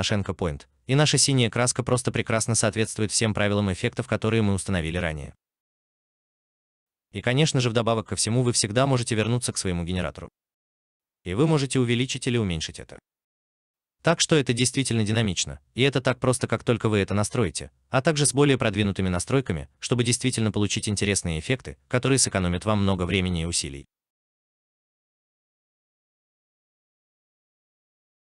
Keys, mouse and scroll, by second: 0.8 alt+click, 5.3 alt+right click, 5.9 alt+click, 16.6 alt+right click, 20.2 alt+right click, 22.0 alt+middle click, 22.6 alt+right click, 23.7 alt+right click, 24.6 alt+middle click.